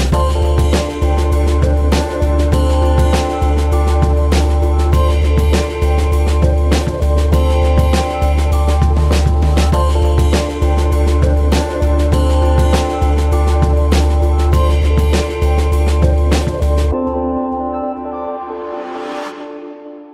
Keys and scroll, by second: 2.7 space, 7.8 KP_0.